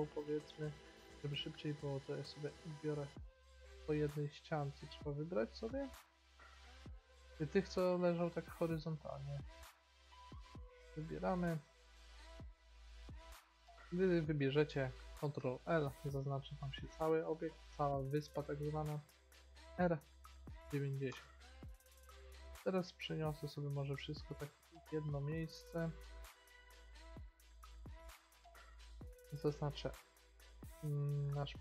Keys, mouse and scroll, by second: 0.9 b, 2.0 b, 2.7 b, 3.5 b, 4.3 b, 5.4 click, 9.3 b, 10.6 b, 11.5 b, 12.4 b, 15.5 ctrl+l, 19.7 r, 23.0 b, 23.7 g, 24.4 b, 25.3 g, 26.2 middle click, 27.1 b, 27.6 g, 30.6 ctrl+l.